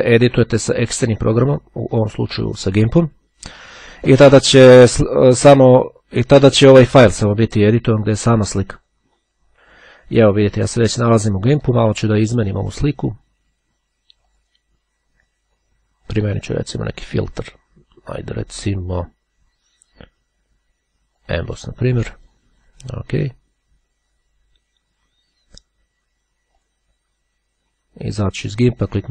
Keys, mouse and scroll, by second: 7.9 click, 8.9 click, 14.4 click, 16.4 click, 21.3 click, 22.8 click, 26.6 click, 28.2-29.1 drag.